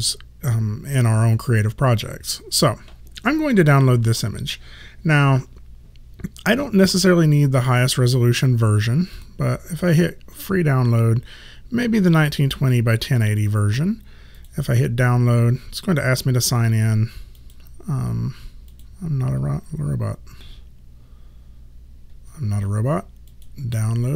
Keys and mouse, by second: 9.2 click, 14.4 click, 16.6 click, 23.3 click.